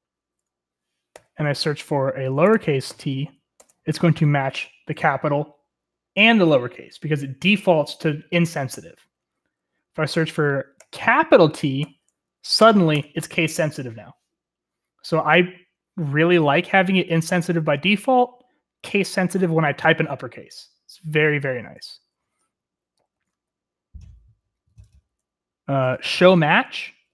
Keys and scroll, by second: 0.0-3.8 typing, 3.8 Return, 10.6-12.7 typing, 13.0 Return, 22.2-27.1 typing.